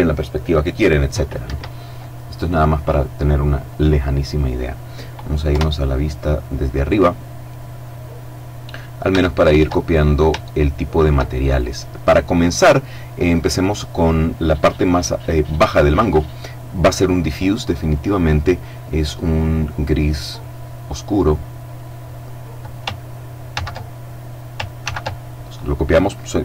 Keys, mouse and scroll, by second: 0.8 Escape, 1.8-2.2 scroll up 2, 2.2-2.8 scroll down 2, 2.8-4.5 scroll down 1, 4.9 KP_7, 7.7-8.5 scroll up 2, 8.5 shift+scroll up 1, 8.6 shift+middle click, 9.2-9.9 shift+scroll up 3, 9.9-11.4 shift+middle drag, 15.0 click, 17.3 click, 18.5 click, 19.3 click, 22.9 ctrl+c, 24.2 ctrl+v.